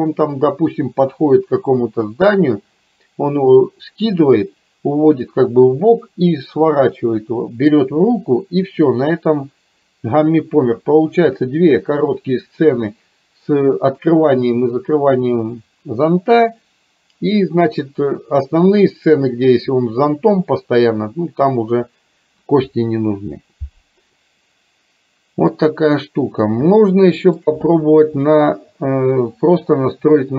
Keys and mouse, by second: 24.2-25.6 middle drag, 26.8-27.4 shift+middle drag.